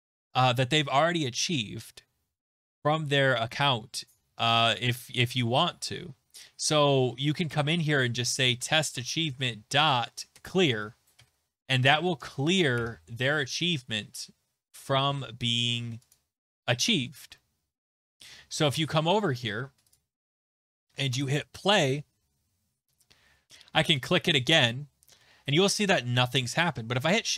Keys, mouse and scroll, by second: 7.5 Return, 7.9-9.2 typing, 10.3 Return, 11.2 typing, 12.1 Right, 12.8 Right, 16.1 click, 18.6 alt+Tab, 19.9 click, 21.2 click, 23.5 alt+Tab, 24.0 click, 26.9 Tab.